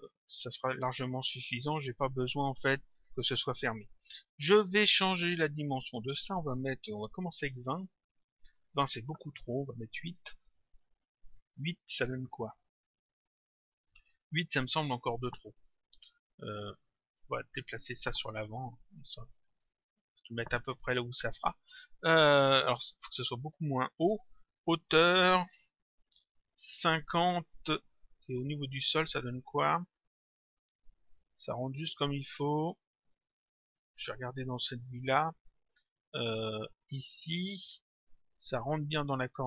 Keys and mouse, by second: 0.8 click, 6.0 click, 7.6 Return, 10.2 click, 11.6 Return, 14.1 click, 17.8 click, 20.8 click, 24.7 click, 26.7 Return, 28.6 click, 30.0 click, 33.7 middle click, 36.8 middle click.